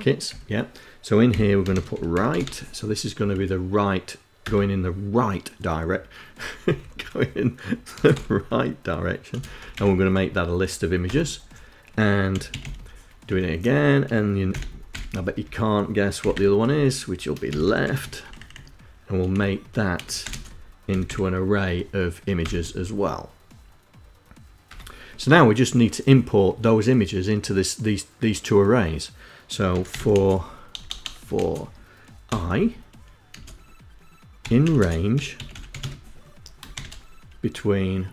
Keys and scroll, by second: 0.7 ', 1.3 i, 1.7 h, 2.5 Down, 2.7 Down, 3.7 Return, 6.0 Up, 6.3 End, 7.3 space, 7.5 =, 8.9 [, 10.4 Return, 11.4-12.4 typing, 12.6 Tab, 13.8 [, 14.2 ], 14.7 Left, 15.5 ', 16.0 Left, 16.6-17.8 typing, 17.8 Right, 18.7 Left, 19.2-20.4 typing, 21.8 Return, 24.0 Return, 29.0 f, 30.0-31.6 typing, 32.6 space, 33.9-36.1 typing.